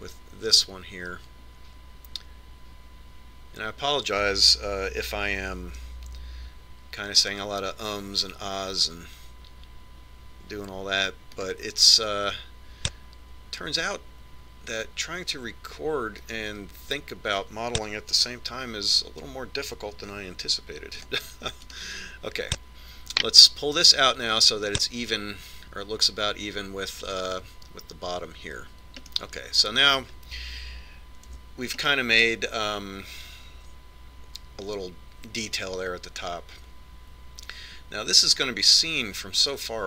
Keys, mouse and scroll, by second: 7.0 ctrl+r, 20.5 c, 23.1-24.9 right drag, 24.7 click, 30.6-32.4 middle drag, 32.8 z, 33.4-35.3 middle drag.